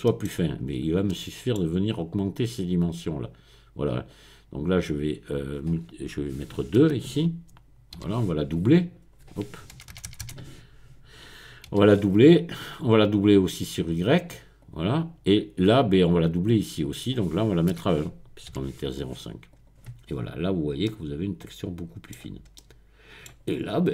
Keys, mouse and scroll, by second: 0.1 middle click, 0.7-1.5 scroll up 1, 1.5 middle click, 4.1 click, 4.9 click, 6.8 BackSpace, 8.0 KP_2, 9.8 BackSpace, 9.9 BackSpace, 10.1 BackSpace, 10.2 BackSpace, 11.7 KP_2, 12.5 click, 13.5-14.5 drag, 14.6 click, 16.5 click, 17.7 BackSpace, 18.5 KP_1, 19.5 click, 20.1-20.9 scroll up 1, 22.1-22.6 scroll down 1, 23.5 click.